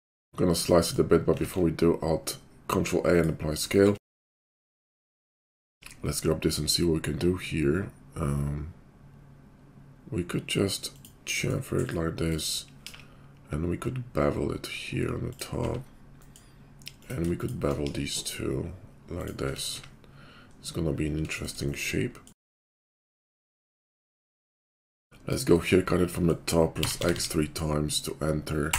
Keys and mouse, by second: 1.4 ctrl+a, 4.1 Tab, 5.3 `, 5.7 ctrl+b, 5.8-12.3 middle drag, 12.3 click, 12.8 ctrl+KP_5, 12.8 ctrl+b, 12.8-16.9 ctrl+middle drag, 15.5 `, 16.9 click, 17.0 shift+middle click, 17.3 shift+click, 17.4-24.2 shift+middle drag, 17.8 ctrl+b, 19.4 Tab, 19.7 `, 22.5 `, 24.2-28.7 drag.